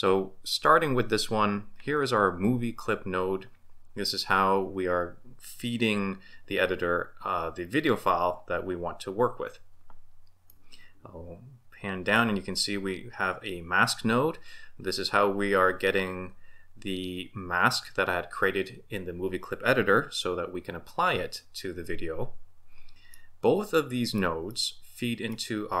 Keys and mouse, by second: 10.5-12.2 middle drag, 23.1-24.2 middle drag, 24.5-25.4 middle drag.